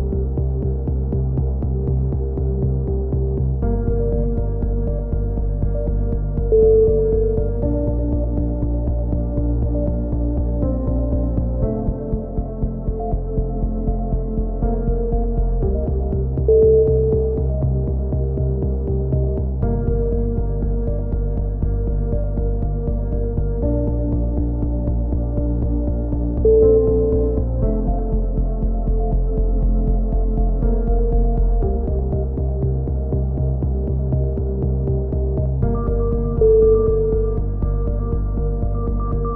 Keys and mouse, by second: 0.2 middle click, 0.5 z, 2.5-4.1 middle drag, 4.1 click, 5.0-6.1 middle drag, 6.1 click, 7.8 click, 9.0 click, 9.9 KP_3, 10.4 click, 11.0-13.5 middle drag, 11.9 g, 15.8-17.5 right drag, 17.8 g, 20.2 a, 20.3 click, 21.9 right click, 23.4 click, 24.5 a, 25.1 right click, 25.3 middle click, 25.6-26.8 drag, 26.3 KP_3, 27.2 g, 29.5 click, 29.8 a, 30.3 z, 30.8 z, 32.8 click, 33.5 right click, 33.7-35.6 drag, 36.0 a, 36.4-37.4 middle drag, 37.4 click, 38.5 middle click.